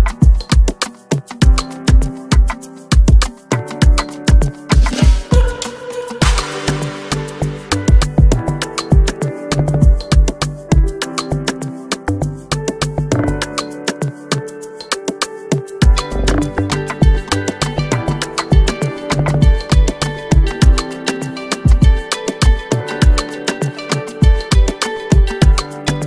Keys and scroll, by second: 13.2 ctrl+j.